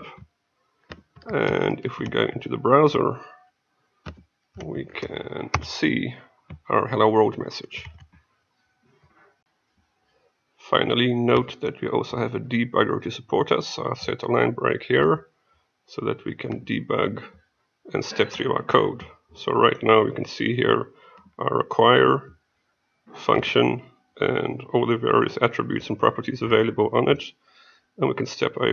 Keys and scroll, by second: 7.9 F6.